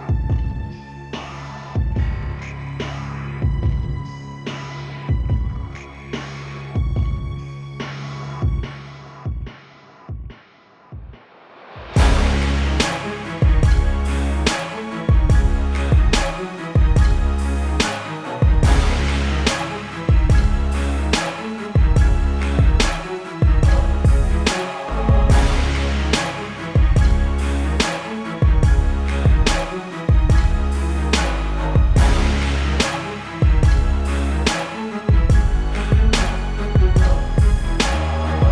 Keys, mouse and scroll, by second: 0.0 alt+click, 2.8 right click, 4.6 click, 9.3-10.4 scroll down 1, 10.4 click, 10.6 Return, 11.4 click, 13.2 KP_0, 14.0 click, 17.2 click, 18.8 Down, 19.4 Up, 21.0 click, 25.0 ctrl+z, 25.4 click, 26.3 click, 32.6 z, 35.8 click, 37.7-38.5 typing, 38.3 click.